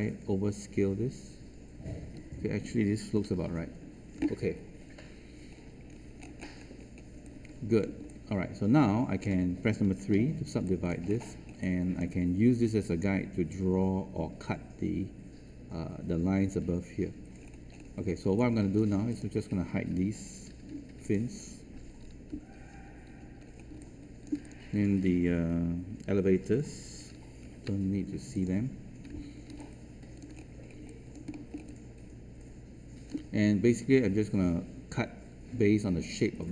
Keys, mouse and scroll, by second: 5.5 ctrl+z, 5.5 scroll down 1, 5.8-6.7 scroll up 1, 6.7-7.1 scroll down 1, 7.1 space, 7.2 click, 8.4 alt+click, 10.1 alt+3, 10.6 alt+click, 11.0 scroll up 1, 11.5 alt+click, 17.3 scroll down 1, 17.6-18.2 scroll up 1, 19.0 click, 20.4 h, 21.0-22.0 drag, 23.0 h, 23.4 scroll down 1, 23.7 alt+click, 24.4 click, 27.8-28.6 typing, 28.3 click, 29.5 alt+click, 30.3 scroll up 1, 31.0 alt+click, 31.2 alt+middle click, 32.0-33.0 alt+drag.